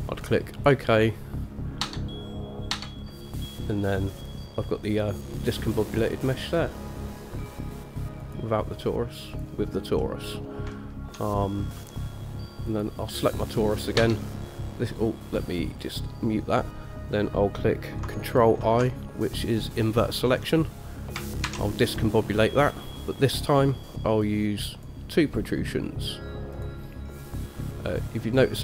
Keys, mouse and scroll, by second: 2.0 Tab, 2.9 Tab, 4.4 click, 5.1 click, 6.2 click, 6.6 click, 8.4 click, 9.5 click, 10.2 middle click, 10.9 shift+middle click, 12.9 click, 14.2 Tab, 16.0 click, 18.8 ctrl+i, 21.6 shift+a.